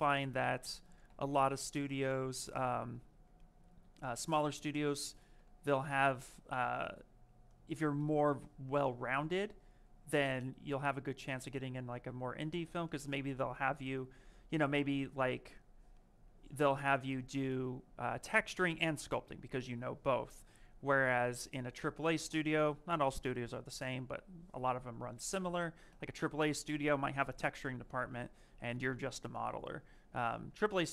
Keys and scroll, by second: 1.0 m, 5.3 ctrl+z.